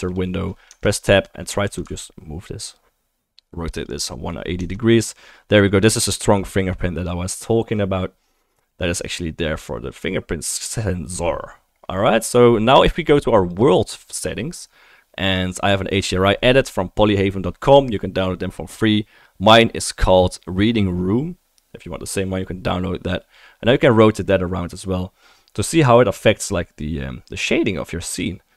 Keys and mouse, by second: 0.7 Tab, 1.2-1.5 middle drag, 1.7 r, 3.3-3.9 ctrl+middle drag, 3.4-5.1 ctrl+drag, 3.4-3.9 ctrl+right drag, 4.6 Tab, 5.1-5.6 right drag, 5.6-8.8 drag, 8.8-13.5 right drag, 13.5 middle click, 13.6-23.8 right drag, 23.8-26.0 middle drag.